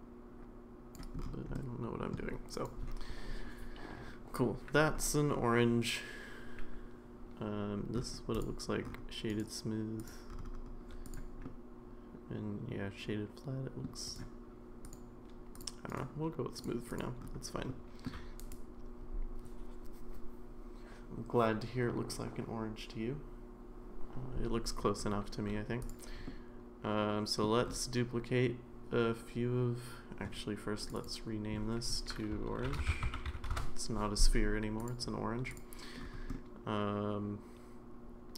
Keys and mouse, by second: 1.5-2.1 middle drag, 2.5 click, 8.4-8.8 drag, 9.4-10.1 right drag, 11.4-13.8 middle drag, 14.1-14.7 right drag, 15.6-16.0 drag, 16.0-16.6 right drag, 17.7 middle click, 25.8 click, 26.3-27.4 middle drag, 30.8 click, 30.9-33.9 drag, 36.3-38.3 middle drag.